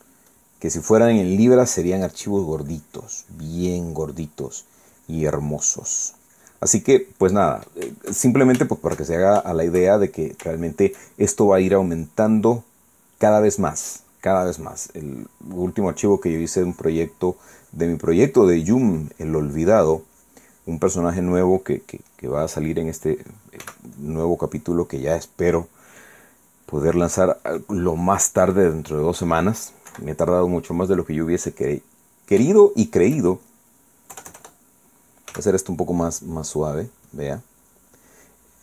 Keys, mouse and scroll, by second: 1.3 click, 2.1 click, 2.5 middle click, 3.7-8.2 drag, 8.2 middle click, 8.9-11.4 shift+middle drag, 11.6-12.6 shift+middle drag, 14.0-17.2 middle drag, 17.7-22.1 drag, 22.4-23.4 middle drag, 23.6 middle click, 24.6 f, 24.9 click, 25.4 click, 26.7 click, 27.4-28.6 drag, 29.0 click, 29.4 click, 29.7 middle click, 30.9 KP_1, 33.5 shift+middle click, 35.1 KP_Add, 36.3 f, 36.7 click, 37.1-38.6 drag.